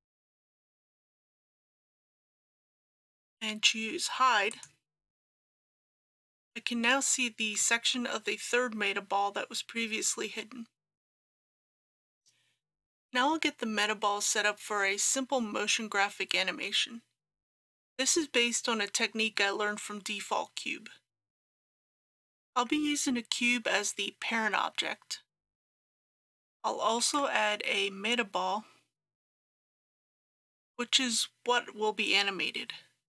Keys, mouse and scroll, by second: 6.2-8.4 middle drag, 12.1 click, 27.0 shift+a, 30.2 click.